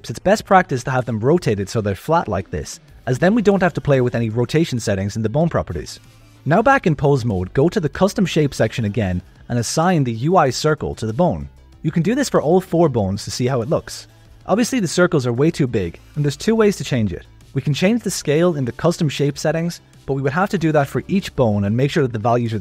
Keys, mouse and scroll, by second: 6.3 click, 7.0 click, 7.7 click, 8.9 click, 9.4 click, 10.4 click, 10.7 click, 11.2 click, 12.2 click, 12.7 click, 13.8 click, 14.5 a, 18.5 click, 19.5-22.6 drag.